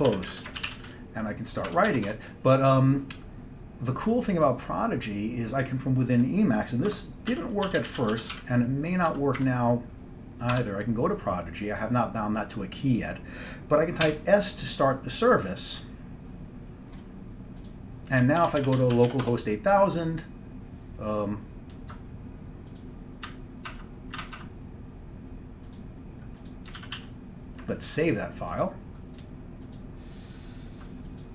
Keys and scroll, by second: 0.0-1.8 typing, 2.0 Return, 2.1 Return, 6.9 Escape, 7.1-8.9 typing, 9.1 Down, 9.4 Up, 10.6 Return, 14.1 s, 18.4-19.6 typing, 23.8 alt+Tab, 24.3 alt+Tab, 24.4 alt+Tab, 26.8 ctrl+x, 27.0 ctrl+s.